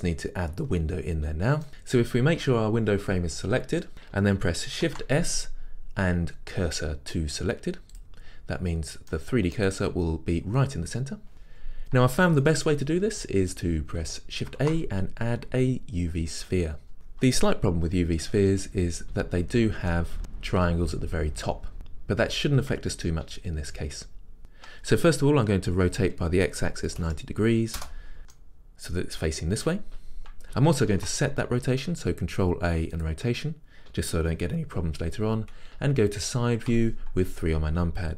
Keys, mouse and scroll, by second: 1.7 click, 8.1 shift+s, 9.2-20.0 middle drag, 16.9 shift+a, 19.4-20.0 scroll down 2, 25.9 r, 27.9 Return, 28.2 middle click, 33.1 ctrl+a, 36.7 KP_3.